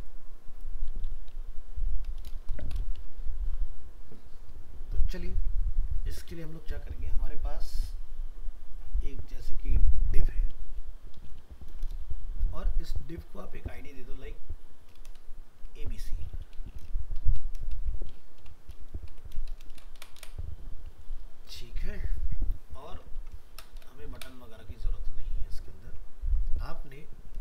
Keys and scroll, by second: 3.2 ctrl+s, 21.1 ctrl+s, 26.2 ctrl+s.